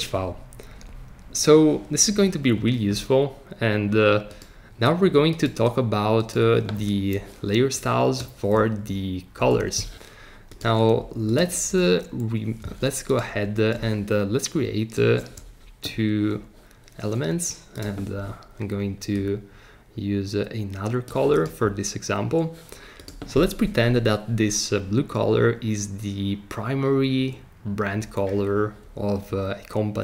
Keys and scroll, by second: 9.4 BackSpace.